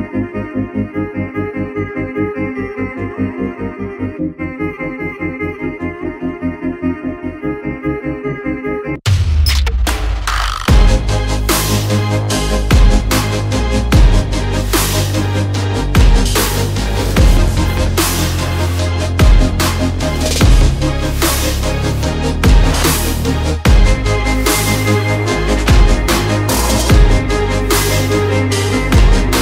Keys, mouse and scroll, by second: 0.5 click, 3.3 ctrl+z, 3.7-5.2 typing, 6.6-8.7 typing, 9.6 click, 11.4 alt+click, 13.2 click, 15.6-18.2 typing, 21.0-22.8 typing, 23.7 click, 26.1 click.